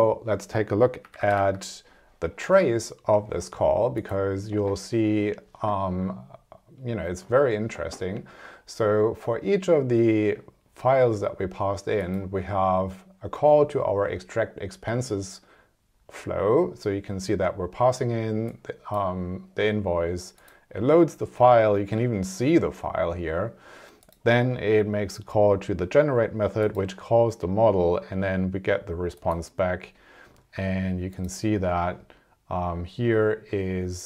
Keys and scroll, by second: 1.1 super+=.